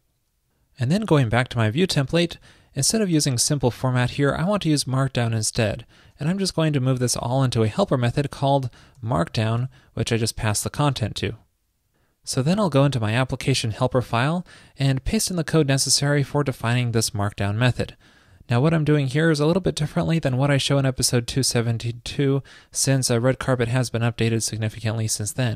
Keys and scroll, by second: 3.2 alt+shift+Right, 9.7 super+s, 15.4 super+v, 17.2 super+s.